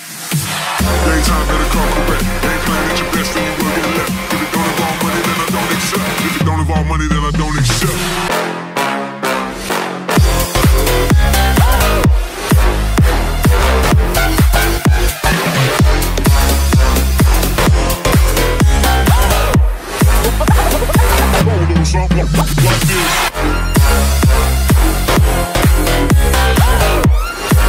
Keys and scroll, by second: 9.3 shift+/, 10.3 space, 11.1 Home, 19.9 space, 26.7 ctrl+space.